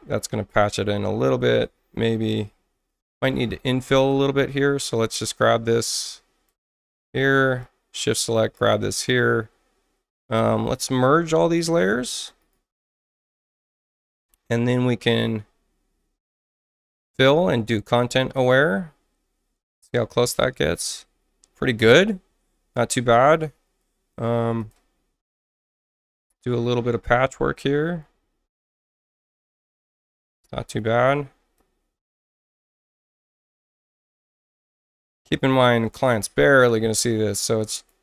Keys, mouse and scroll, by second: 0.4 click, 1.4 shift+click, 3.9 click, 4.9-6.4 drag, 7.6-8.7 shift+drag, 9.1 right click, 11.1 shift+click, 11.7 shift+click, 12.4 right click, 13.5 click, 15.0 right click, 16.9 click, 18.3 click, 21.8 click, 24.6 click, 25.6 click, 27.5 click, 29.0 click, 30.4 click, 31.5 click, 32.8 click, 34.0 click, 35.8 click, 36.6 click, 37.6 click.